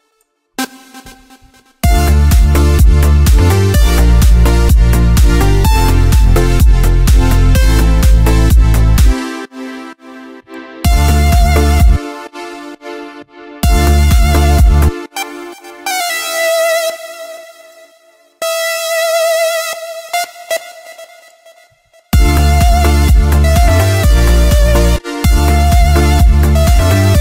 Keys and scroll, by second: 1.3 ctrl+Up, 1.7 space, 8.9 space, 10.7 space, 13.4 space, 21.9 space, 24.7 space.